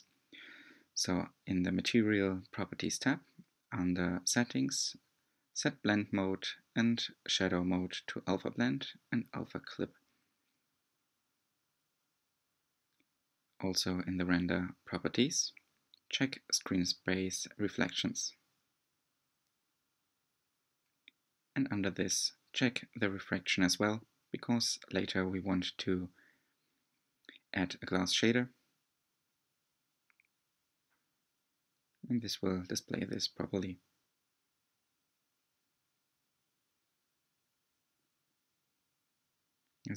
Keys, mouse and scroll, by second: 1.2 click, 7.9 click, 21.2 click, 22.2-25.3 drag, 29.6 click, 31.9-32.3 scroll down 3, 32.7-33.2 middle drag, 33.2-34.1 scroll up 4, 34.1 drag, 35.8 drag, 36.5-37.0 scroll down 4, 37.0 middle click, 37.5-38.2 scroll up 4, 38.2 scroll down 3, 38.4-39.2 middle drag, 39.2-39.7 scroll down 1, 39.7 click.